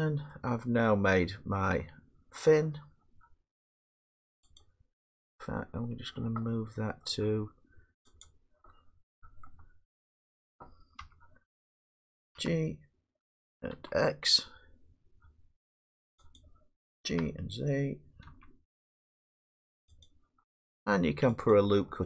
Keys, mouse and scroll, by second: 0.3 middle click, 0.4 middle click, 0.4 middle click, 0.5 middle click, 0.8 scroll, 1.9 scroll down 4, 2.3-5.5 middle click, 4.6 click, 5.4 scroll up 4, 5.9-6.7 scroll, 7.6-8.2 scroll, 8.2 click, 9.1-9.5 drag, 9.5 middle click, 11.0 1, 12.4 g, 13.7 x, 16.4 click, 17.1 g, 18.3 z, 20.1 click, 21.5 click.